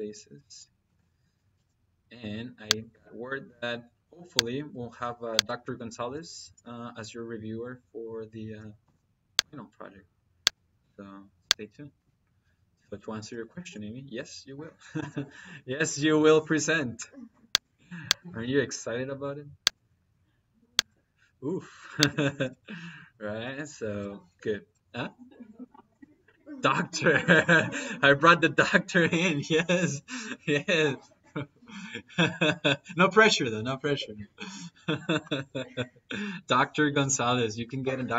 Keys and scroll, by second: 1.4 –, 8.7 -, 14.8 –.